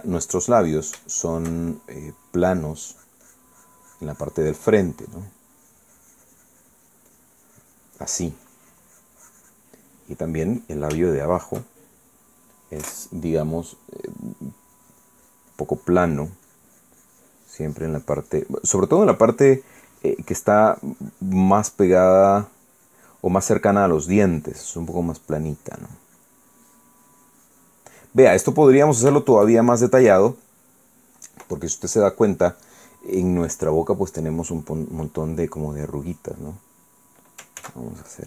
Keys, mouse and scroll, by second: 1.2 middle click, 2.0-3.3 shift+middle drag, 3.9-10.7 drag, 10.8 middle click, 12.0-13.0 shift+middle drag, 15.5-28.8 drag, 29.0 middle click, 29.5 middle click, 30.1-31.9 shift+middle drag, 32.8 click, 33.4 click, 36.7 click.